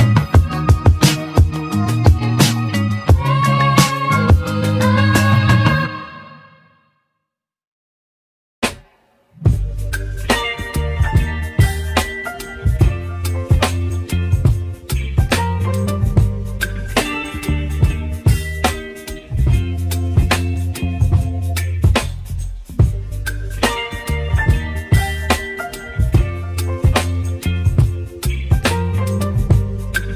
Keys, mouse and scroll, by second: 4.0 ctrl+r, 4.7 ctrl+r, 7.3-8.0 scroll up 2, 8.0-9.8 shift+middle drag, 9.8 click, 11.0 2, 11.3 click, 12.1 3, 12.2 click, 12.9 shift+click, 13.8-15.1 middle drag, 15.1 shift+click, 15.5 shift+click, 16.2-18.7 middle drag, 19.3 ctrl+r, 19.9 ctrl+r, 22.8 s, 24.6-27.2 middle drag, 27.5 g.